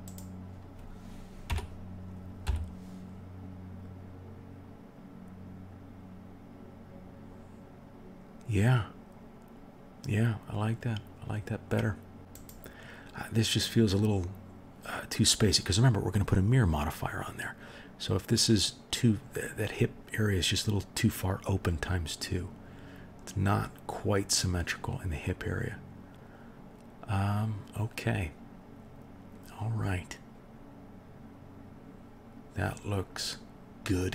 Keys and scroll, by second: 1.4 g.